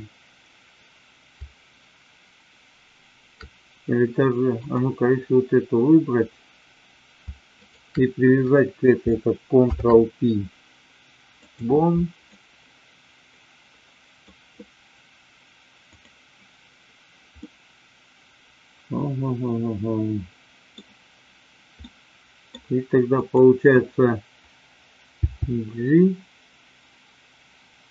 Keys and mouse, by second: 9.5 ctrl+p, 12.3-14.3 middle drag, 15.8 click, 17.3-20.7 middle drag, 21.8-22.5 middle drag, 23.1 click, 25.2 g.